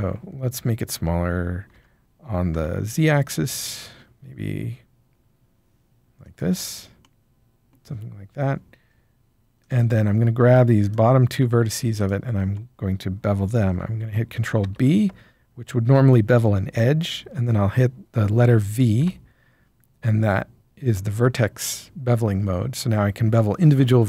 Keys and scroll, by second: 1.7 s, 2.5 z, 14.6 ctrl+b, 18.9 v.